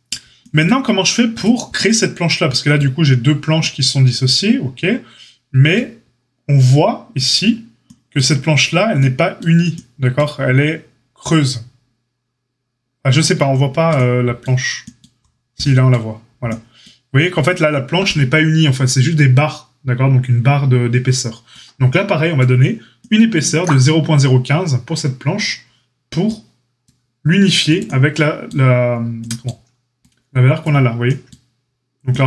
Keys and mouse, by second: 1.3 click, 1.4-32.2 middle drag.